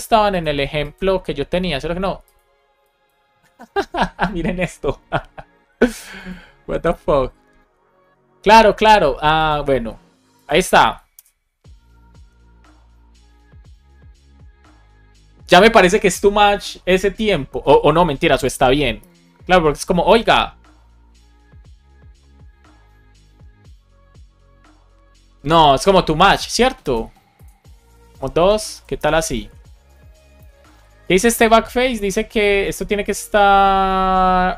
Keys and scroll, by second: 11.1 Return, 18.9 Return, 27.9 BackSpace, 28.3 Down, 28.5 Left, 28.9 BackSpace, 29.2 super+s, 30.3 alt+shift+f, 30.6 super+s.